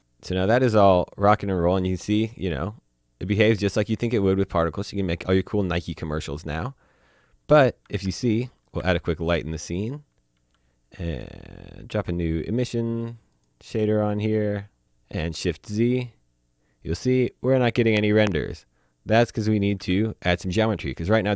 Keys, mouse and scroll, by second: 1.3-7.5 drag, 7.9-10.3 typing, 8.4 click, 8.6 click, 9.6 click, 9.9 click, 10.2 click, 10.5 click, 11.0 click, 14.1 click, 15.2 z, 19.6 click, 19.8 z.